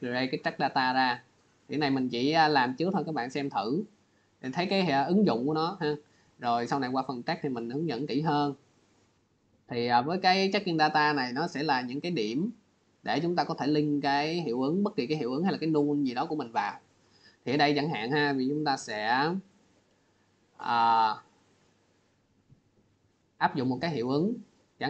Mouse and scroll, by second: 0.2 click, 2.2 click, 9.4 click, 12.2 click, 16.0 click, 17.9 click, 18.7 click, 20.9 click, 23.4 click.